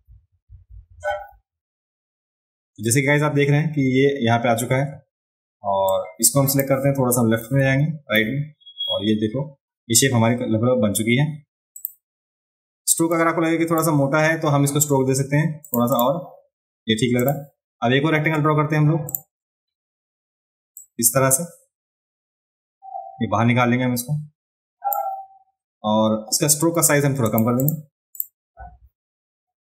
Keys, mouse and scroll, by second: 5.9 click, 11.8 click, 13.1 click, 15.6 click, 15.9 click, 17.2 click, 19.1 click, 20.7-24.9 drag, 27.3 click, 27.6 click, 28.2 click.